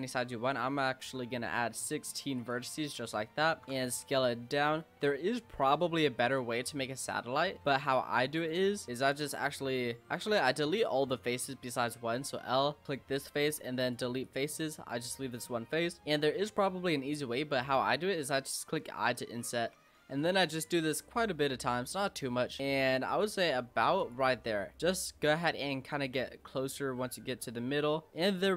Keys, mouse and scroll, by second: 2.4 click, 2.8-3.4 middle drag, 3.4 scroll up 1, 3.5 Tab, 3.6 s, 6.7 middle click, 7.5 scroll up 4, 7.6 s, 8.7-10.7 middle drag, 10.7 click, 12.1 l, 12.8 shift+click, 13.4 x, 14.2 click, 14.5 middle click, 15.5 scroll up 1, 15.7 middle click, 16.0-18.0 scroll up 2, 18.5 i, 19.8 i, 20.9-24.8 typing, 26.1 i, 27.6 i.